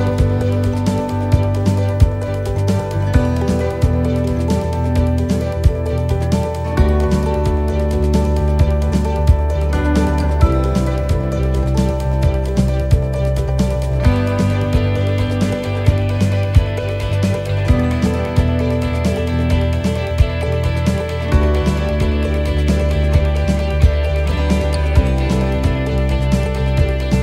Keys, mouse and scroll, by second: 1.2 click, 5.7 right click, 8.6 right click, 8.6-9.1 scroll down 1, 9.1 scroll down 1, 9.3 shift+middle click, 9.7-10.1 scroll up 3, 10.1 shift+middle click, 11.0 right click, 12.2 click, 17.3-17.6 scroll down 1, 17.6 middle click, 18.0-18.5 scroll down 2, 18.5 shift+middle click, 19.1 middle click, 19.6 scroll down 1, 20.1 shift+middle click, 20.7 middle click, 21.4 shift+middle click, 22.1 right click, 23.2 click, 24.5 right click, 25.4 l, 26.3 x.